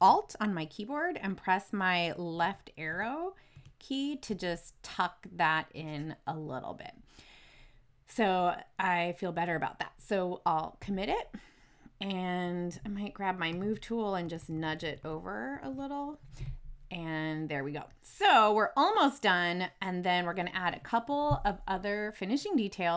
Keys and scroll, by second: 2.3 alt+Left, 13.4 v, 14.2 Left.